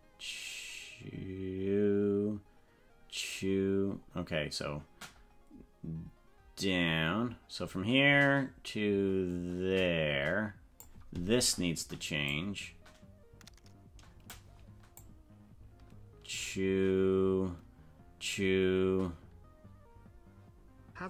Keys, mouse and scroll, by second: 12.2-14.4 drag, 15.0-21.0 drag.